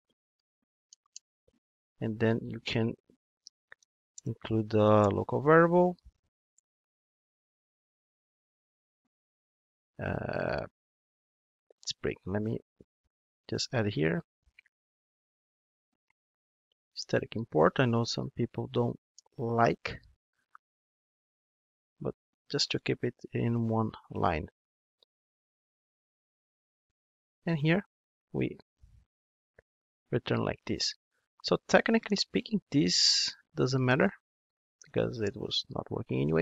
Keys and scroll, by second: 0.8 alt+Return, 2.0 super+z, 4.1 alt+Return, 13.5 alt+Return, 15.4 super+c, 16.9 alt+Return, 24.9 super+c, 29.7 super+v, 30.8 super+1.